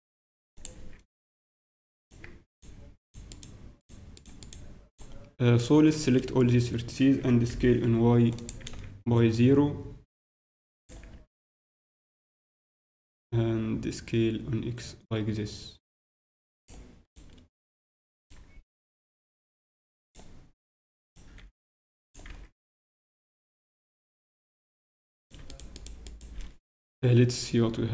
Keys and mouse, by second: 0.7 z, 1.8 z, 3.4-7.4 right drag, 7.1 z, 7.2 s, 8.6 z, 9.3-11.1 drag, 11.2 z, 11.7 z, 12.4 s, 17.0-19.9 right drag, 19.8 g, 21.0-22.7 right drag, 21.3 g, 22.3 z, 22.7-24.6 middle drag, 23.1 z, 25.2-27.7 right drag.